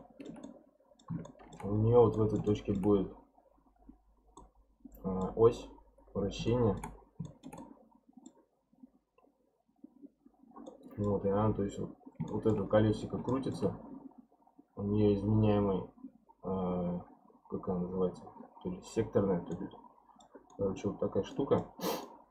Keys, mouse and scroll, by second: 1.8-2.1 scroll up 3, 2.1-4.1 middle drag, 4.1 scroll down 3, 4.4-6.1 middle drag, 6.1-6.5 scroll down 1, 6.5-6.9 shift+middle drag, 6.9-7.2 scroll down 1, 7.2 shift+middle drag, 7.5-9.8 scroll up 1, 9.8-10.6 scroll up 1, 10.7-12.6 middle drag, 12.6-13.3 scroll up 1, 13.3-13.8 shift+middle drag, 13.8-15.4 scroll down 1, 15.4-16.8 scroll down 1, 19.5-21.8 middle drag, 21.8 scroll up 2, 22.0-22.3 middle drag.